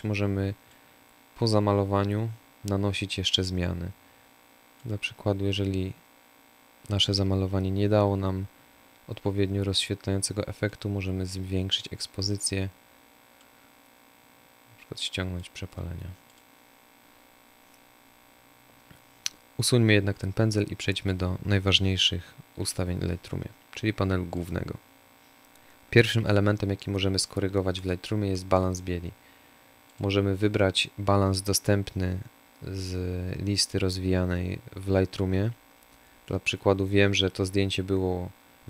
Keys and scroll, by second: 21.2 Delete.